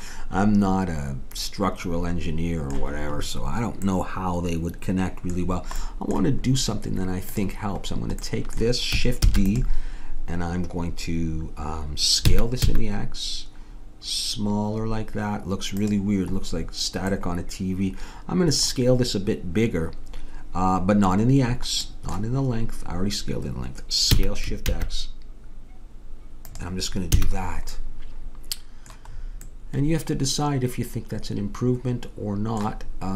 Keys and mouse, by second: 1.3-2.4 middle drag, 3.9-7.3 middle drag, 7.3-9.2 drag, 9.2 shift+d, 12.2 s, 17.1 middle click, 24.1 s, 27.1 a.